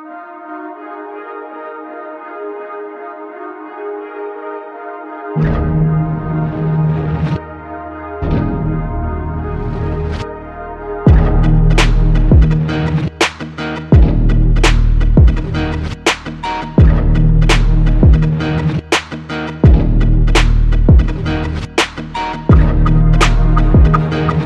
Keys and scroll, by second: 7.6 F8, 8.8 Escape, 20.8 ctrl+s, 23.3 Escape.